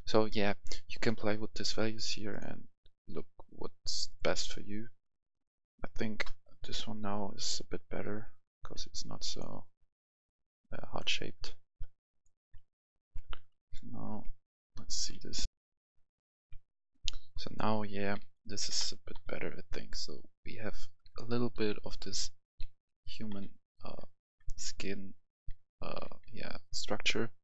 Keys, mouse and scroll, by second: 12.9 F11, 13.0 F10, 13.6-14.7 drag, 15.4 F11, 15.5 F10, 16.3 click, 16.4 F10, 17.3-21.0 right drag, 18.1 w, 18.6 w, 19.1 w, 21.0-25.9 typing, 27.3-27.4 typing.